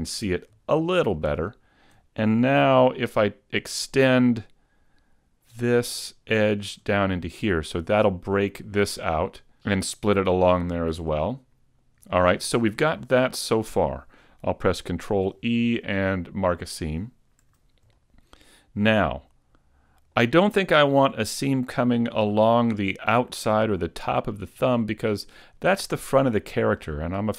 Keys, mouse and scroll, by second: 0.1 Tab, 1.1 shift+middle click, 2.4 middle click, 5.4 shift+right click, 6.5 shift+right click, 7.0 middle click, 11.1 middle click, 12.1 shift+middle click, 13.0 scroll down 1, 13.2 middle click, 15.1 ctrl+e, 17.4 a, 17.9 middle click, 24.3 middle click, 24.9-27.3 scroll down 1.